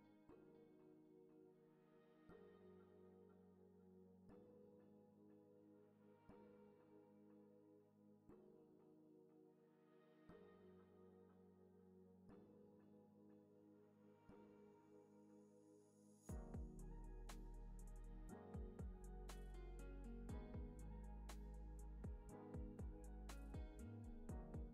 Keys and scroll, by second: 4.3 z, 16.2 u, 18.2 space, 19.6 super+=.